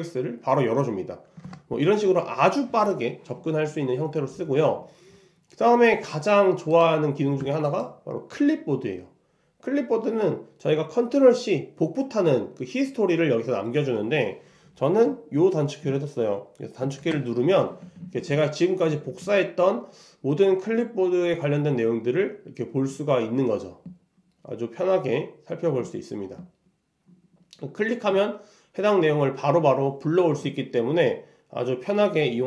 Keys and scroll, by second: 1.5 super+Tab.